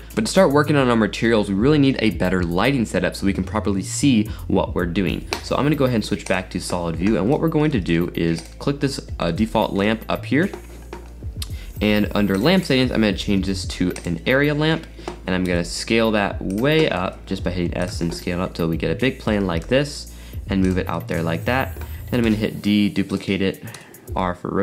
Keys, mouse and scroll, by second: 0.1-2.4 middle drag, 6.4 click, 6.8-7.7 scroll down 7, 7.7-8.5 middle drag, 8.5 click, 9.5-10.1 shift+middle drag, 10.1-14.0 scroll up 2, 14.0 click, 14.7-15.5 scroll down 4, 15.5 s, 17.0 s, 18.3-19.6 middle drag, 19.6 g, 21.0-21.6 middle drag, 21.6-22.3 scroll down 4, 22.3 shift+d, 23.8 r.